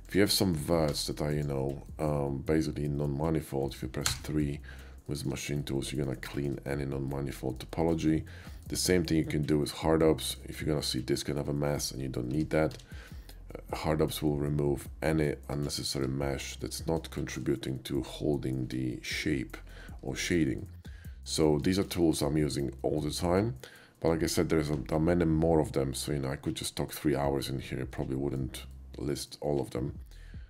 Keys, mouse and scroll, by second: 0.1 shift+click, 0.4 shift+middle click, 0.9 e, 1.3 click, 1.9-3.7 middle drag, 4.2 3, 4.8 middle click, 5.1 shift+middle click, 5.6 shift+middle click, 6.3 shift+middle click, 7.1 shift+middle click, 7.9 shift+middle click, 8.3 shift+middle click, 8.5 shift+middle click, 10.2 shift+middle click, 10.3 shift+click, 12.4 Tab, 12.7 q, 12.9 Tab, 15.6 click, 16.1 Tab, 16.5-17.0 middle drag, 17.2 shift+middle click, 17.7 shift+middle click, 19.6 shift+middle click, 21.3 middle click, 21.9-24.1 shift+middle drag, 26.9 middle click, 28.0 middle click, 28.7 middle click, 30.1 middle click.